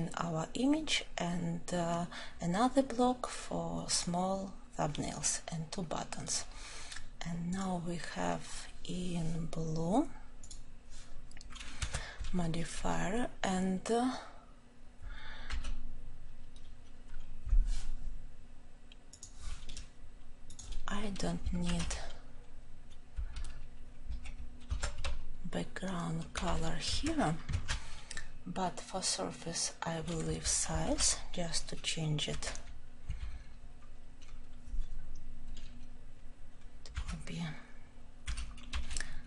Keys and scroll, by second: 21.6 ctrl+;, 30.8 ctrl+;.